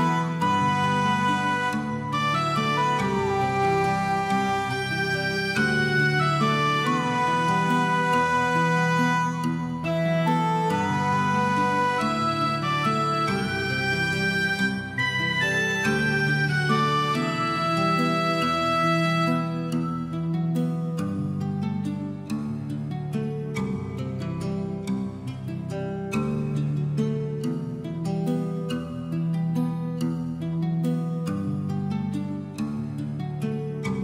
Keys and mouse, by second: 0.3 alt+middle click, 0.6 g, 0.7 z, 1.3 middle click, 2.0 middle click, 2.2 shift+middle click, 2.5 g, 2.6 z, 3.3 click, 3.7 shift+middle click, 3.9 shift+middle click, 4.5 click, 4.9 click, 5.2 g, 5.3 z, 5.9 click, 6.2 shift+middle click, 6.4 shift+middle click, 6.8 shift+middle click, 8.4 click, 8.6 shift+click, 9.1 shift+click, 9.4 shift+click, 9.9 click, 10.1 g, 10.6 click, 10.8 click, 11.1 g, 11.3 click, 11.6 alt+z, 11.7 shift+middle click, 11.8 Tab, 12.2 shift+middle click, 12.4 middle click, 12.9 alt+middle click, 13.8 Tab, 13.9 shift+middle click, 14.2 middle click, 14.5 alt+middle click, 14.7 alt+middle click, 15.3 g, 15.4 g, 15.6 right click, 17.7 middle click, 18.0 shift+middle click, 18.6 click, 18.8 g, 19.5 right click, 19.8 middle click, 20.2 g, 21.1 click, 21.2 click, 21.4 g, 22.1 click, 22.2 middle click, 22.4 alt+middle click, 22.6 alt+middle click, 23.1 alt+z, 23.2 alt+middle click, 23.4 shift+middle click, 23.9 alt+z, 23.9 g, 24.4 click, 24.5 middle click, 25.1 middle click, 25.3 click, 25.5 middle click, 25.7 g, 26.2 click, 26.5 alt+middle click, 26.6 alt+middle click, 26.9 alt+middle click, 27.3 alt+z, 27.4 g, 28.1 click, 28.2 middle click, 28.5 alt+z, 28.6 click, 28.8 alt+middle click, 29.1 alt+z, 29.3 g, 29.7 click, 29.9 alt+middle click, 30.1 alt+z, 30.2 middle click, 30.5 alt+middle click, 30.7 alt+middle click, 30.9 shift+middle click, 31.1 click, 31.3 g, 31.7 click, 32.1 g, 32.3 click, 32.8 g.